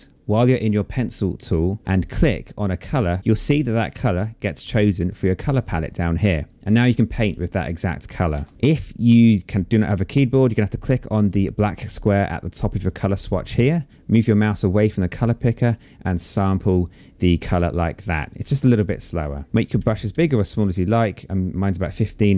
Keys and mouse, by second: 1.8 alt+click, 6.2 click, 7.9 ctrl+z, 10.6 click, 15.1 click, 16.4 click, 17.8 click.